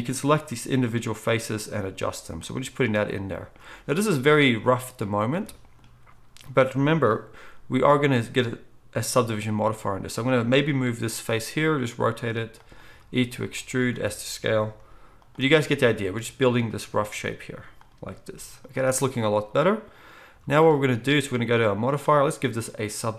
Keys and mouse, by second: 0.3 g, 7.5 g, 11.4 r, 12.8 e, 13.9 s, 14.7 g, 17.1 s, 18.1 g, 20.3 z.